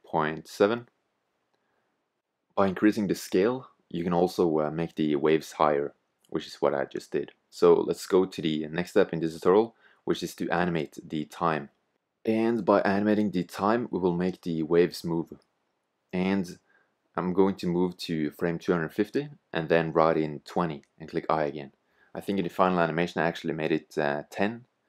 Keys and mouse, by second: 2.0-11.9 drag, 11.9 i, 13.7-15.6 drag, 18.0-20.8 drag, 20.8 i, 22.5 click, 24.4 click.